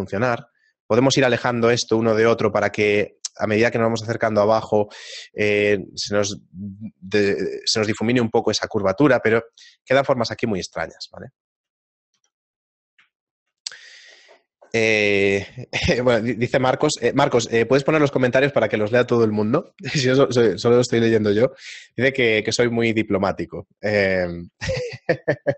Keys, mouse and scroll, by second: 0.5 g, 1.7 right click, 2.0 g, 7.8 Tab, 8.4-9.1 scroll down 3, 9.0 shift+middle click, 11.9 right click, 12.2 x, 13.1 shift+middle click, 24.9 middle click.